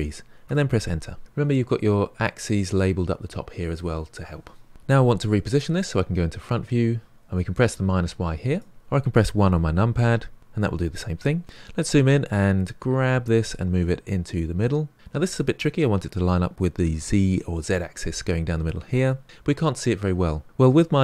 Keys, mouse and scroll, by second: 8.5 click, 11.4-12.8 scroll up 6, 12.8 g.